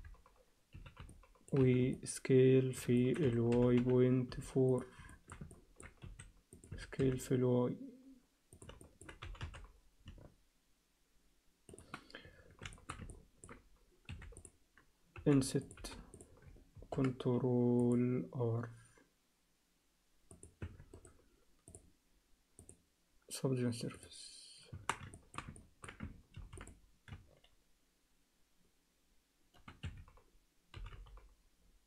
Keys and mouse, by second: 0.9 z, 1.1 alt+middle click, 1.6 z, 1.9 alt+middle click, 3.0 alt+shift+middle click, 3.2 s, 5.1 alt+shift+middle click, 5.5 ctrl+alt+middle click, 5.8 s, 6.0 s, 6.7 s, 8.8 alt+shift+middle click, 9.2 g, 12.2 Tab, 12.7 alt+shift+middle click, 13.1 ctrl+alt+middle click, 14.1 3, 14.4 click, 15.2 i, 15.8 i, 16.8 ctrl+r, 20.6 Tab, 21.1 right click, 22.7-24.1 drag, 24.7 Tab, 25.1 alt+shift+middle click, 25.6 ctrl+alt+middle click, 26.3 ctrl+r, 30.8 g.